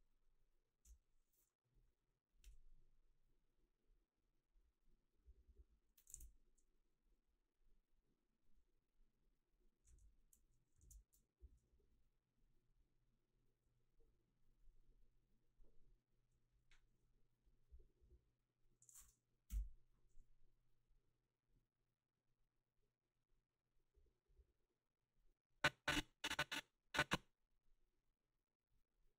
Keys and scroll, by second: 0.9 Delete, 6.1 ctrl+s, 19.5 Delete.